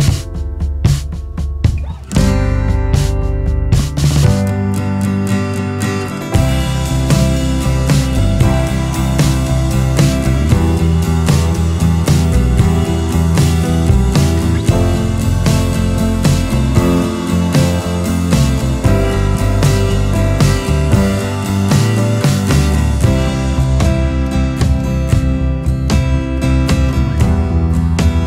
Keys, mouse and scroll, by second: 10.4 ctrl+z, 10.6 ctrl+z, 16.4 ctrl+z, 18.3 ctrl+z, 21.7 ctrl+z, 26.6 click, 27.6 alt+space.